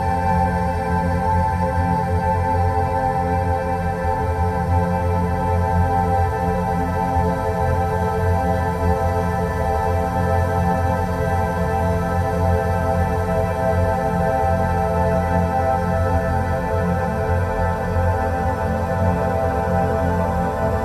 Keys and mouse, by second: 3.4 click, 3.7-7.0 drag, 8.6 click, 8.9 click, 12.6 s, 20.6 s.